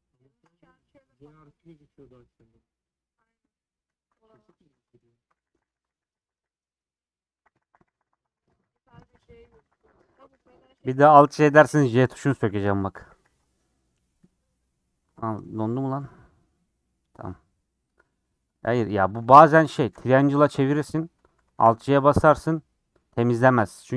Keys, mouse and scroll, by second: 0.3 shift+click, 1.2 scroll down 2, 2.1-3.2 middle drag, 3.2 click, 3.9 middle click, 4.0 a, 4.5 shift+middle click, 5.3-6.0 alt+j, 6.2 alt+j, 6.3-11.6 alt+j, 11.8 alt+j, 12.0-13.0 alt+j, 13.1 alt+j, 13.3 alt+j, 14.9 scroll down 5, 15.2 click, 15.4 scroll up 4, 15.6 middle click, 16.5 scroll down 2, 16.7 middle click, 17.0-17.6 scroll up 4, 17.6-18.8 middle drag, 19.1 click, 19.4 scroll down 2, 19.6 middle click, 20.2 a, 20.4 ctrl+t, 21.5 alt+j, 22.3 middle click, 23.0 scroll up 2, 23.8 click.